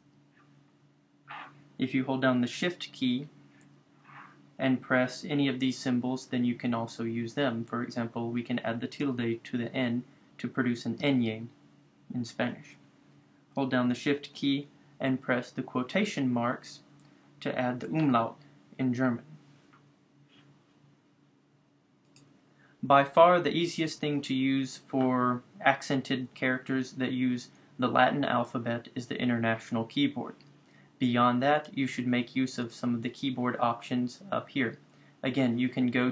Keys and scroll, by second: 11.1 Return.